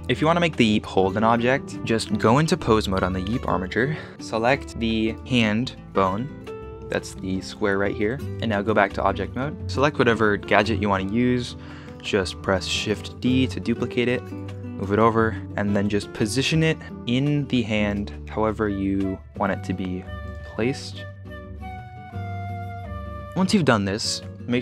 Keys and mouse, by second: 1.7 z, 2.3 ctrl+Tab, 6.0 KP_Decimal, 8.5 ctrl+Tab, 12.9 shift+d, 13.4 x, 14.3-14.8 ctrl+drag, 15.1 KP_1, 15.6 shift+middle click, 16.4 g, 17.4 g, 18.6 middle click, 18.9 middle click, 19.2 r, 20.4-22.8 typing, 21.3 middle click, 21.5 click, 22.1 click.